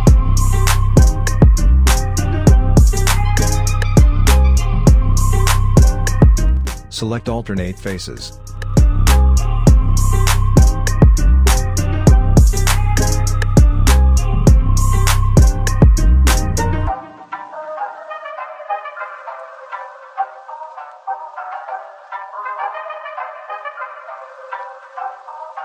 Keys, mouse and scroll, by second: 6.6 click, 7.6 shift+click, 9.2 shift+click, 12.0 alt+click, 15.4-17.8 alt+drag, 17.8 shift+click, 19.8 alt+click, 21.0 shift+click, 22.9-25.2 alt+drag.